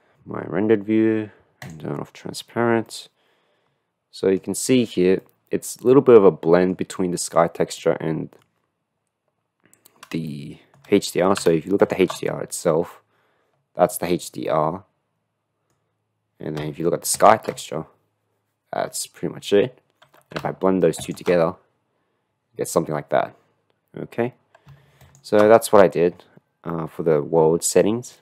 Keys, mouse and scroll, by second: 1.1 click, 1.6 click, 3.2 middle click, 4.5-5.3 middle drag, 5.9-6.9 middle drag, 7.8-8.5 middle drag, 10.6 shift+middle click, 14.1-15.9 middle drag, 17.3 ctrl+shift+click, 21.2 ctrl+shift+click, 26.9 middle click.